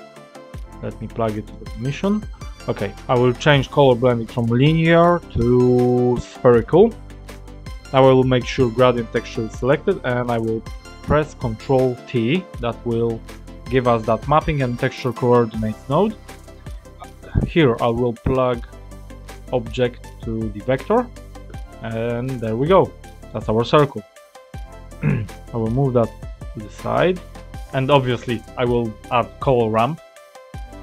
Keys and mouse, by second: 0.6-1.4 drag, 4.9-6.3 drag, 11.5 ctrl+t, 16.0 click, 16.9 click, 19.4-20.5 drag, 23.0 click, 24.0-24.6 drag, 25.5-26.7 drag, 27.7 click, 28.9 shift+a.